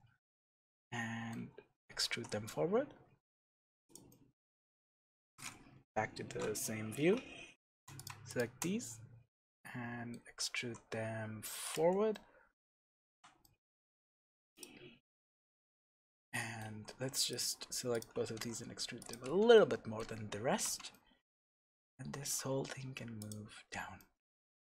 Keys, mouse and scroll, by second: 0.7-3.3 middle drag, 1.7-2.1 scroll down 2, 2.1 e, 3.9 click, 4.1 middle click, 5.7 KP_3, 6.2-7.0 scroll up 1, 7.0 alt+a, 7.9 click, 8.2 shift+click, 9.4-11.7 middle drag, 10.2 scroll down 1, 10.6 e, 11.7 click, 12.1-14.5 middle drag, 13.0 Tab, 14.5 click, 14.8-15.3 scroll down 1, 15.3-16.7 shift+middle drag, 16.7 Tab, 17.3 click, 17.9 shift+click, 18.3 e, 19.1 click, 19.2 Escape, 19.5-23.3 middle drag, 20.6 Tab, 21.7-22.2 scroll down 1, 22.2 g, 23.3 click, 23.5-23.9 scroll down 1, 23.9-24.7 middle drag, 24.6 g.